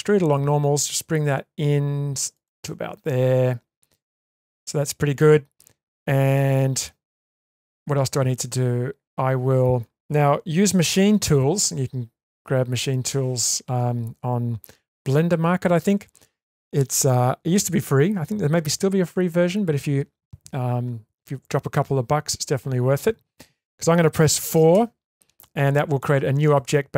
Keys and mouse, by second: 2.7-3.9 middle drag, 4.3 shift+middle click, 24.7 4.